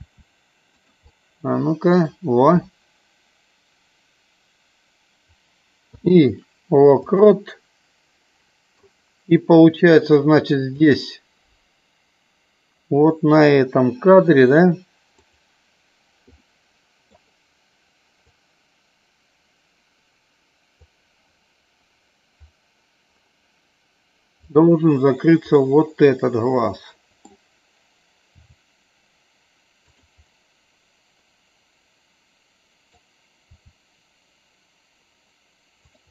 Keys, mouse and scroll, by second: 0.6 click, 1.1 middle click, 5.7 i, 8.3 middle click, 10.8 click, 15.2 click, 16.3 middle click, 18.3-20.8 drag, 24.3 click, 25.5-27.2 middle drag, 30.2-32.8 middle drag, 33.6 r.